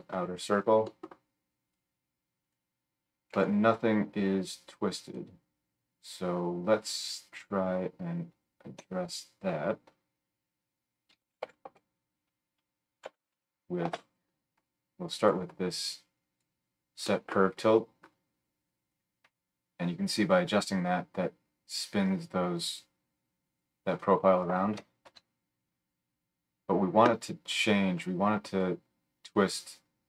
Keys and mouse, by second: 1.7-17.2 drag, 1.7-5.1 middle drag, 3.3 g, 8.8 F3, 15.9-17.2 middle drag, 15.9-17.2 right drag.